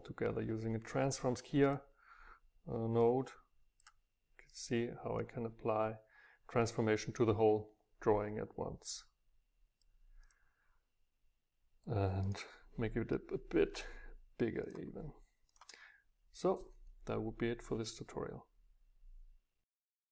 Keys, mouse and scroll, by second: 3.4-4.5 drag, 9.1-12.3 drag, 13.2 click, 13.4 click, 13.7 click, 13.8-15.4 middle drag, 13.8-14.3 scroll up 2, 14.3 scroll down 2, 15.4 Down.